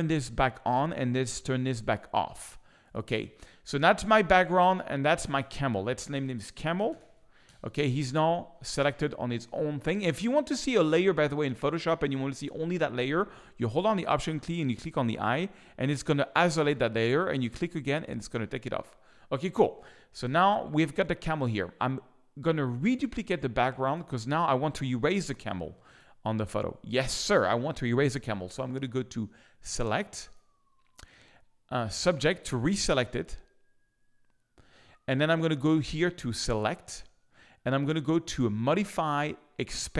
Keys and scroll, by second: 6.1-7.5 typing, 25.6 z.